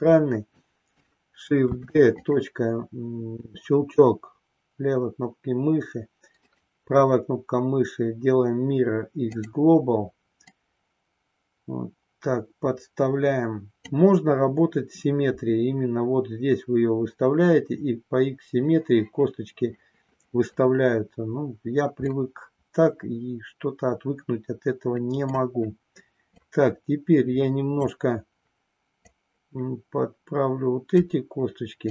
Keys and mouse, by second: 1.6 shift+d, 2.2 click, 6.4-9.5 right drag, 10.4-13.8 drag, 22.0-25.4 middle drag, 26.4-27.8 drag, 28.9-30.9 drag, 31.8 click.